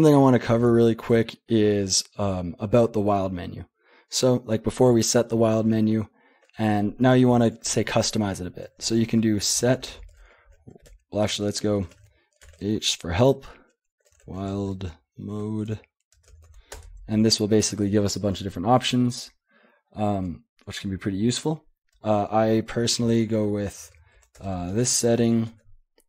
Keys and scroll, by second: 8.9-12.5 typing, 13.9-24.8 typing, 24.4 Return, 25.2 ctrl+p, 25.5 ctrl+p.